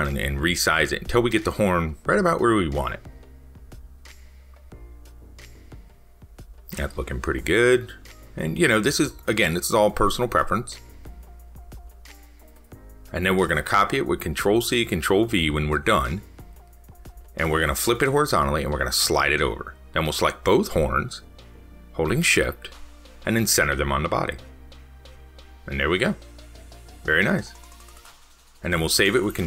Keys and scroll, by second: 17.6 ctrl+c, 17.8 ctrl+v, 28.2 ctrl+s.